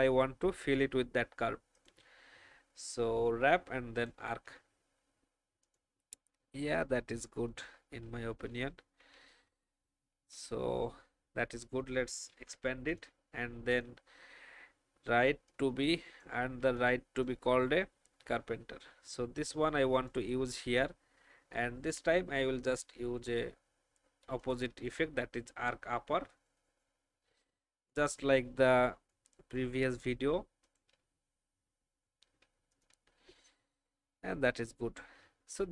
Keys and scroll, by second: 6.5 shift+Down, 8.4 Up, 8.7 Up, 8.8 Up, 9.1 Right, 9.4 Up, 9.9 Up, 10.2 Up, 12.3 ctrl+2, 33.6 shift+Up, 34.1 Up, 34.3 Up.